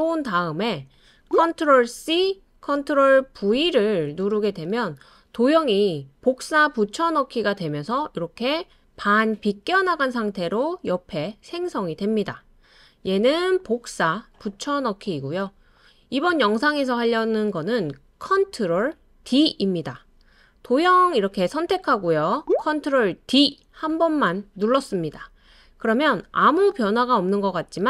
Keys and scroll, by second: 1.9 super+c, 3.4 super+v, 4.2 super+space, 23.2 super+d.